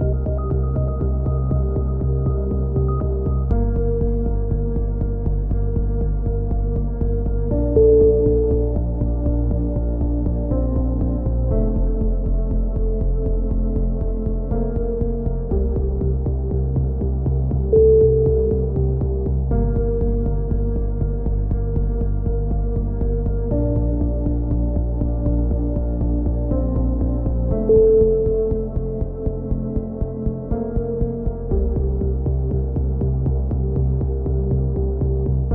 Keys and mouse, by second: 0.0-2.5 typing, 2.2 right click, 3.0 right click, 3.2 click, 3.8 z, 4.2 right click, 4.4 z, 4.9 click, 5.8 a, 6.0 z, 6.3-7.3 drag, 7.3 ctrl+KP_7, 8.0 z, 9.0 click, 9.8 z, 10.2 click, 11.5 ctrl+z, 11.7 ctrl+z, 11.8 ctrl+z, 12.3-13.5 drag, 13.3 ctrl+KP_7, 14.2 click, 17.3 a, 17.5 z, 18.2 click, 19.5 click, 20.1 ctrl+KP_7, 20.2 middle click, 21.5 z, 22.3 click, 23.3 click, 23.5 Left, 23.8 ctrl+KP_7, 24.2 z, 24.5 click, 25.8 a, 26.0 z, 26.4 Tab, 27.3 click, 29.8 KP_7, 30.5 Tab, 31.0 z, 32.8 click, 33.6 z, 34.2 z, 34.3 a, 34.4 z, 34.8 click, 35.3 click, 35.4 click.